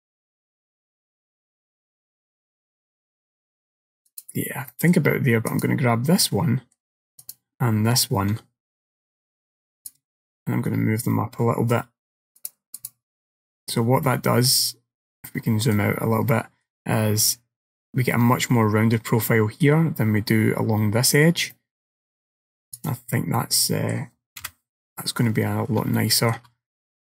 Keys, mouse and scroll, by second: 4.8 middle click, 5.6 click, 6.3 middle click, 7.3 shift+click, 9.9 click, 12.4 click, 13.5-14.1 scroll up 2, 14.1 middle click, 14.7-15.3 scroll down 1, 15.3 middle click, 15.3 scroll down 2, 16.3 middle click, 21.6 middle click, 22.8 click, 23.4 middle click, 24.5 KP_1, 25.3-26.0 scroll up 8, 26.0 shift+middle click, 26.9-27.1 scroll up 1.